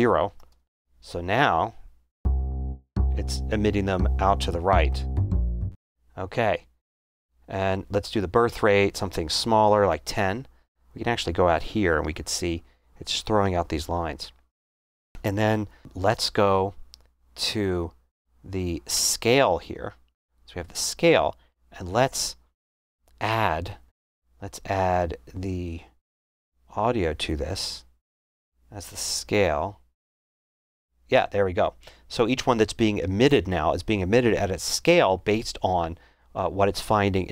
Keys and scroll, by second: 0.4 0, 0.5 Return, 9.2-10.1 typing.